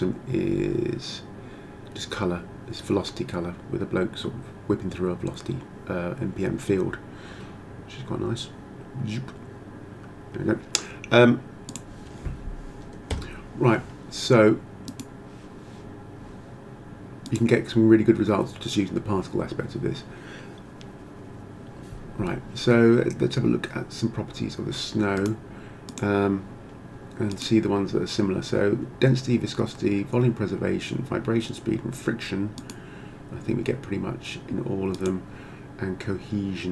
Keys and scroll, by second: 13.1 Escape.